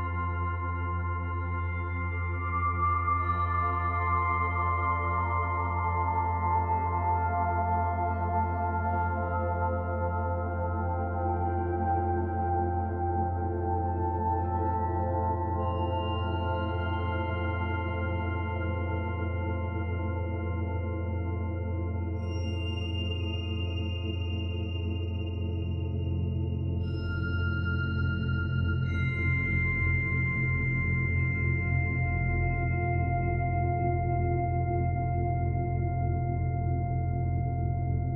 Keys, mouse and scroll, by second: 0.0 click, 1.8 middle click, 3.2-4.6 scroll up 3, 4.6 click, 4.6 scroll up 1, 6.7 middle click, 8.0-8.6 scroll down 2, 8.6 scroll down 1, 8.6 s, 11.1 click, 12.5 middle click, 13.4 click, 15.2 Tab, 15.6 right click, 18.1 click, 18.3 click, 19.1 click, 19.7 middle click, 21.2 click, 22.1 click, 30.5 middle click, 31.5 Tab, 31.9 middle click, 32.4 right click, 33.8 middle click, 36.4 shift+d, 37.3 click.